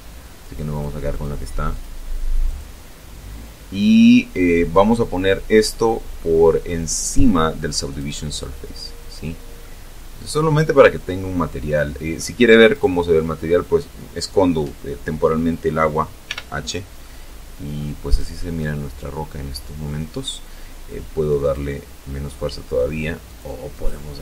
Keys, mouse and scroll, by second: 0.0 click, 0.6 click, 1.3 click, 6.7 click, 8.5-11.3 middle drag, 11.5 right click, 15.1 h, 15.8 middle click, 16.9 right click, 17.4-18.8 middle drag, 20.2 click, 22.1 click, 22.5 click.